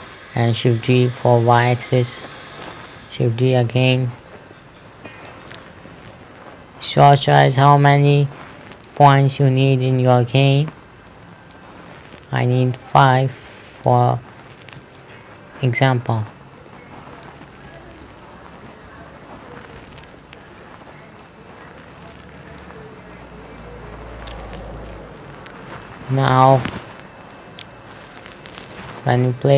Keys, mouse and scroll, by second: 1.2 shift+d, 1.8 y, 2.7 click, 4.1 shift+d, 4.5 x, 5.6 click, 6.5 shift+d, 8.2 typing, 9.2 click, 9.6 middle click, 11.5 click, 15.4 right click, 16.5 click, 18.4 z, 19.3 shift+z, 20.3 ctrl+z, 21.1 middle click, 22.6 click, 23.6 middle click, 24.4 scroll down 1, 24.7 middle click.